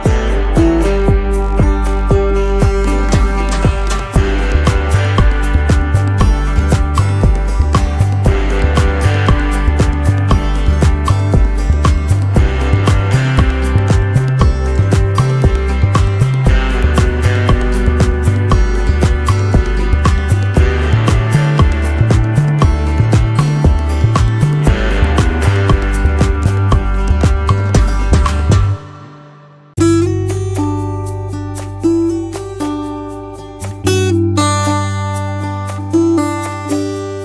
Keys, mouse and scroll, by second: 3.3 shift+click, 3.7 right click, 5.3 double click, 9.6 shift+click, 15.8 double click, 16.3 space, 16.6 double click, 16.7 space, 18.0 ctrl+l, 18.5 space, 27.3 double click, 30.8 space, 31.1 double click, 31.2 space, 32.8 alt+scroll, 33.2 space, 33.7 alt+scroll, 34.1 space.